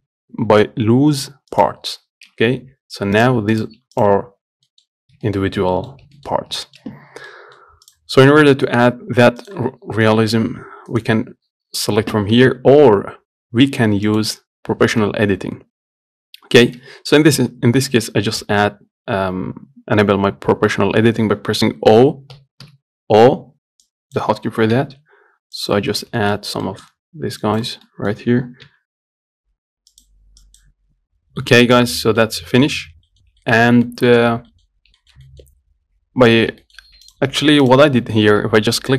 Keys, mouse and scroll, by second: 2.8 Tab, 3.4 click, 3.8 click, 4.2 click, 4.7 scroll down 1, 4.9 middle click, 5.2-5.5 scroll up 1, 5.5 shift+middle click, 5.7 scroll down 1, 6.0 middle click, 6.2 scroll up 1, 6.5 shift+middle click, 6.7 scroll up 1, 6.9-8.1 shift+middle drag, 8.1 click, 8.4 scroll up 1, 8.5 middle click, 8.8 Tab, 9.7 click, 10.6 g, 12.7 Tab, 14.3 click, 17.4 Tab, 18.0 Tab, 22.2 o, 22.6 o, 24.1 click, 25.0 g, 26.2 scroll up 3, 26.5 shift+middle click, 26.6 scroll down 1, 26.9 middle click, 27.2 scroll up 1, 27.7 click, 28.1 middle click, 28.9 g, 30.7 click, 31.7 middle click, 32.1 scroll down 1, 32.3 middle click, 32.5 scroll up 2, 32.8 shift+middle click, 33.1 scroll down 2, 33.4 middle click, 33.9 scroll up 1, 34.1 middle click, 34.5 scroll down 1, 34.8 middle click, 35.0 scroll up 2, 35.3-36.6 shift+middle drag, 36.6 scroll up 1, 36.9 shift+middle click, 37.3 click, 37.9 click, 38.5 Tab.